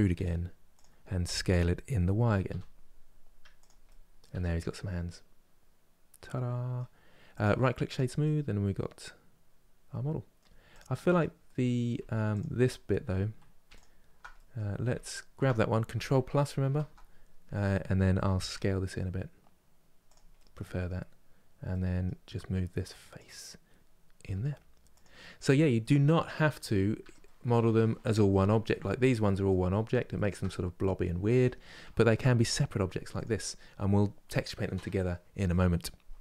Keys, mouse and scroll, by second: 3.5 middle click, 4.0 Tab, 4.3-4.7 scroll down 1, 4.7-7.6 middle drag, 7.6 right click, 7.9-10.4 middle drag, 10.4 click, 11.1 middle click, 11.6 Tab, 12.0 click, 12.5 scroll up 1, 13.4 alt+click, 15.9 KP_Add, 16.3 KP_Add, 18.2 s, 20.0-22.9 middle drag, 22.9 click, 23.9 g, 25.0 scroll down 2, 25.5 middle click, 26.4-26.7 scroll down 1, 26.7 Tab, 26.9-28.6 middle drag, 28.6-29.4 scroll down 1, 29.4-32.1 middle drag, 32.1 click, 32.9 click.